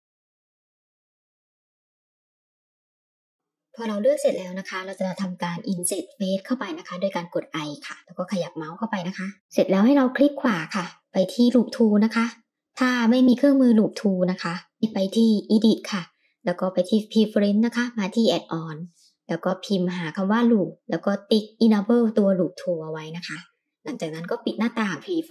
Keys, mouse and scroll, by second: 0.1 shift+click, 0.5 middle click, 1.0 shift+click, 1.4 middle click, 1.7 middle click, 2.1 shift+click, 2.2-3.4 middle drag, 9.0 middle click, 11.0 right click, 12.5 middle click, 14.7 click, 16.2 click.